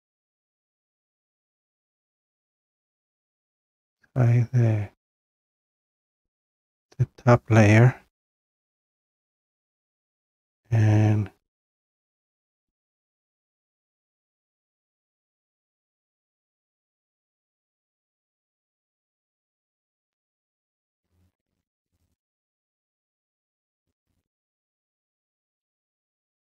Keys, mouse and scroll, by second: 0.9 scroll, 1.5 click, 4.2-4.8 scroll, 6.1-6.5 scroll, 7.2-7.7 scroll down 1, 8.2 scroll down 1, 8.8 scroll down 1, 12.2 click, 12.4 click, 14.9 click, 15.1 click, 16.4 click, 16.6 click, 19.1 click, 19.3 click, 20.3-21.6 scroll, 22.0 click, 22.2 click, 22.7-23.1 scroll down 2.